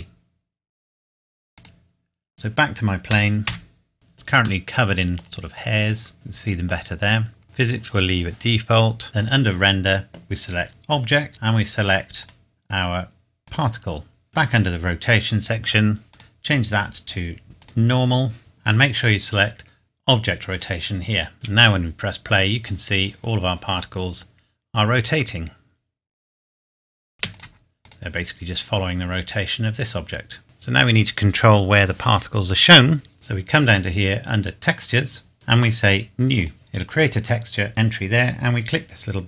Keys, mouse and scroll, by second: 1.5 click, 3.1 KP_Decimal, 3.5 KP_7, 4.6 middle click, 5.5-6.1 scroll up 1, 6.1 click, 6.3 middle click, 7.1-7.4 scroll down 1, 7.4 click, 9.2-10.3 scroll down 1, 10.7 click, 11.3-12.2 scroll down 1, 12.2 click, 14.7-15.6 scroll down 1, 16.1 click, 18.4-19.1 scroll down 1, 20.5 click, 21.3 space, 22.4-23.2 scroll up 1, 27.1 space, 27.3 click, 28.2 scroll down 1, 31.8 scroll down 1, 32.6 scroll down 1, 34.7 click, 35.3 scroll down 1, 36.3 click.